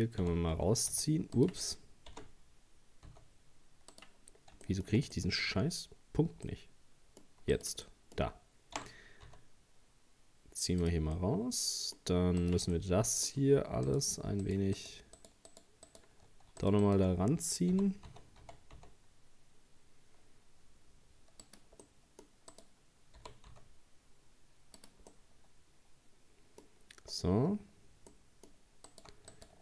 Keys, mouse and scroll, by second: 0.2 g, 0.6 x, 1.4 right click, 2.1 g, 4.3-4.7 scroll down 2, 4.7 shift+middle click, 5.5-6.5 scroll up 3, 6.5-7.5 middle drag, 7.5 right click, 7.9 middle click, 8.8 g, 11.2-12.4 middle drag, 12.4 right click, 12.8-13.9 middle drag, 13.9 shift+right click, 14.5 shift+right click, 14.8 shift+right click, 15.2 shift+right click, 15.5 shift+right click, 15.9 shift+right click, 16.6 shift+right click, 16.8 shift+right click, 17.7 g, 21.9 middle click, 22.5 right click, 23.2 g, 25.1-27.0 middle drag, 27.0-27.5 scroll down 2, 27.5 scroll up 1, 28.1 middle click, 28.9 right click, 29.3 alt+shift+right click.